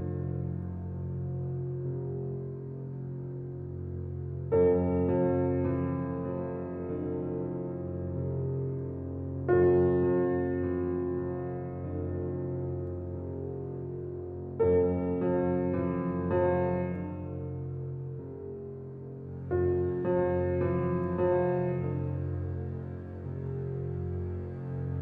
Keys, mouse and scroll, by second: 0.0 shift+click, 0.5 scroll down 4, 0.8-2.0 middle drag, 2.0 shift+click, 2.5 shift+click, 3.1 shift+click, 3.7 shift+drag, 4.0 shift+click, 4.4 shift+click, 4.9 shift+click, 5.6 shift+click, 6.3 shift+click, 6.7 shift+click, 7.4 shift+click, 7.9 shift+click, 8.4 shift+click, 8.8 shift+click, 9.1-10.5 middle drag, 10.5 shift+click, 11.1 shift+click, 11.6-12.7 middle drag, 12.7 shift+click, 13.8-15.7 drag, 16.5 scroll down 3, 16.8 click, 17.5-17.9 middle drag, 17.9 click, 18.4 shift+click, 18.8 shift+click, 19.2 shift+click, 19.9-21.6 drag, 22.1-23.5 middle drag, 23.5 click, 24.1 click, 24.3-25.0 drag.